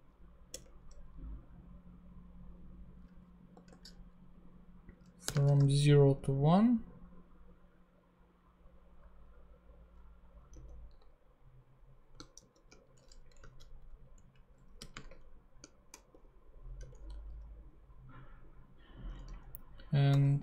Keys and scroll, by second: 0.0 [, 0.5 Return, 3.5 0, 5.4 space, 5.5 |, 10.5 super+z, 12.3 shift+super+z, 13.3 shift+super+Down, 13.5 Left, 14.1 Right, 14.9 ,, 15.1 space, 15.6 shift+space, 16.1 shift+[, 16.7 Return.